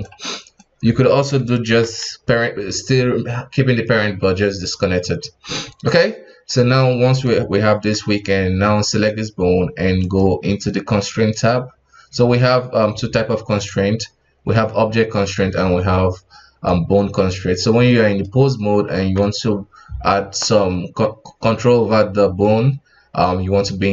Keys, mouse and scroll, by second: 0.3 right click, 1.7 alt+p, 5.2 KP_1, 5.6 Tab, 6.4 right click, 8.9 right click, 10.0 click, 17.8-18.9 middle drag, 18.9 KP_1.